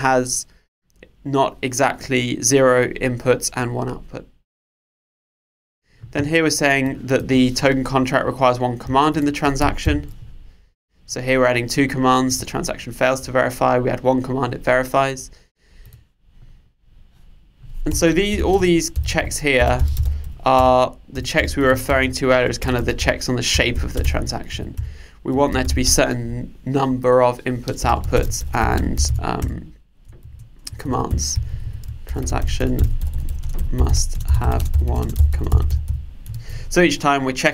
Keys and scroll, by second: 9.9 super+/, 20.6 Return, 29.4 Return, 36.4 super+s.